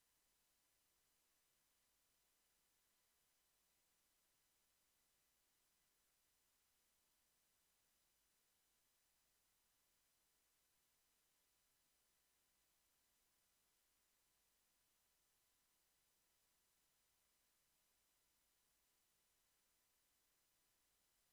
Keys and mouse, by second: 5.6 KP_5, 6.5 KP_5.